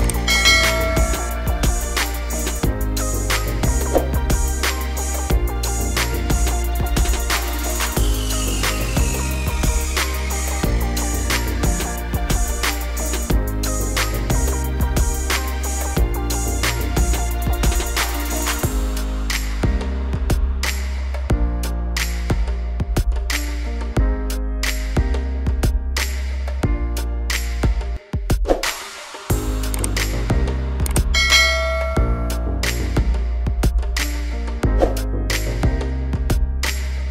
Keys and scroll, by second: 9.6 F9, 19.5 ], 24.4 ].